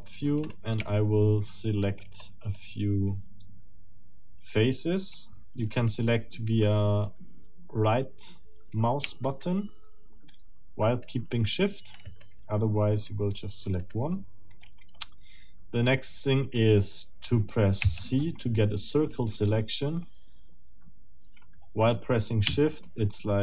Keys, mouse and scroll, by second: 0.4 scroll up 2, 0.9-2.2 shift+middle drag, 2.2-2.7 shift+scroll up 3, 5.7 middle click, 9.3 shift+middle click, 10.9 shift+middle click, 10.9 shift+right click, 12.1 shift+right click, 12.9 shift+right click, 13.8 shift+right click, 17.8 c, 19.1-21.6 drag, 22.8-23.4 shift+drag.